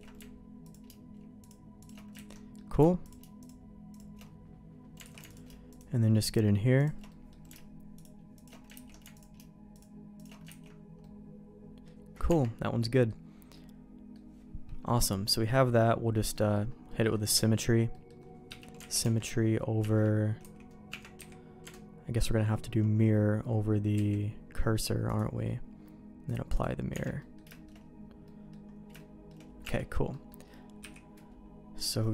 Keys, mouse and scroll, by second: 0.6 alt+click, 1.8 alt+shift+click, 2.1 ctrl+x, 2.3 middle click, 3.9 alt+shift+click, 5.0 alt+a, 6.7 alt+shift+click, 7.1 middle click, 8.3 alt+shift+click, 8.7 ctrl+x, 9.1 alt+click, 9.7 alt+shift+click, 10.5 ctrl+x, 11.0 middle click, 12.2 Tab, 12.8 middle click, 13.5 middle click, 16.3 middle click, 16.9 middle click, 17.5 alt+x, 17.9 middle click, 18.9 alt+x, 25.0-26.6 drag, 26.9 Tab, 27.2 middle click, 27.5 shift+middle click, 28.2 middle click, 28.9 shift+middle click, 29.6 Tab, 30.1 middle click, 30.8 h, 31.7 click.